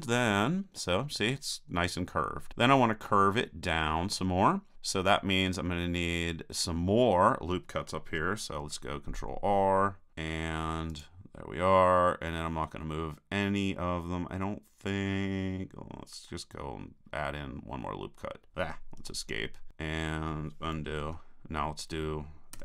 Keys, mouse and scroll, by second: 3.8-5.2 middle drag, 8.6 ctrl+r, 21.0 super+z, 22.5 a.